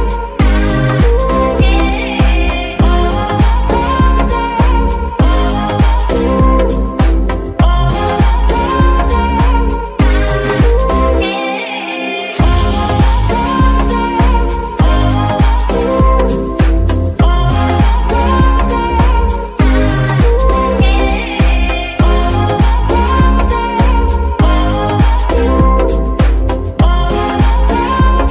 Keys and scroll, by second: 1.7 Escape, 2.9 shift+g, 4.2 alt+g, 5.2 g, 5.9 Escape, 6.2 KP_1, 7.7 shift+g, 11.0 Escape, 13.2 shift+g, 16.1 Escape, 16.6 ctrl+Tab, 24.6 ctrl+Tab, 25.0 ctrl+g, 26.8 Escape, 27.5 g.